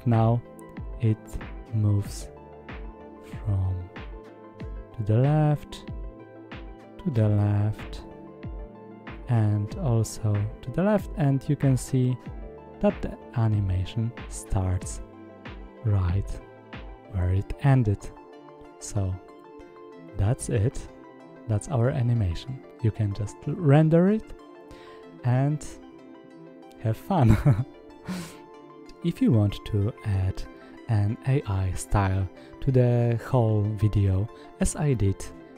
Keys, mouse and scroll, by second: 0.7 space, 28.6 click, 29.5 click, 30.2-30.5 scroll down 1, 30.5 click, 31.0 drag, 31.2-31.6 scroll down 1, 31.6-34.2 drag.